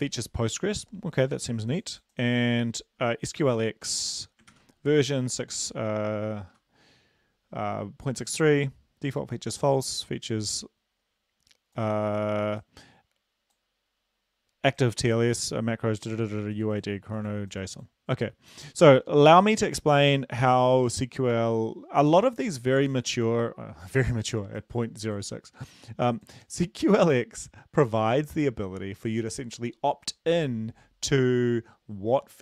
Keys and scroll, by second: 3.4 ctrl+c, 4.5 ctrl+v, 6.5 Left.